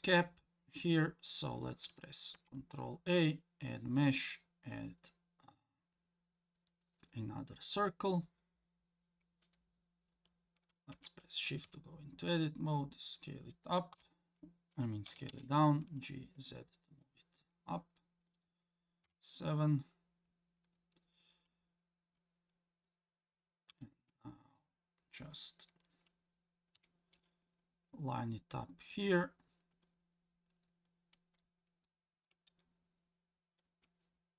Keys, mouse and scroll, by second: 2.3 shift+a, 8.4-10.9 scroll down 1, 10.9 Tab, 11.6 s, 13.9 KP_1, 15.1 g, 19.0 KP_7, 19.9 scroll up 2, 23.7 g, 29.5-31.8 scroll up 1, 31.8 click.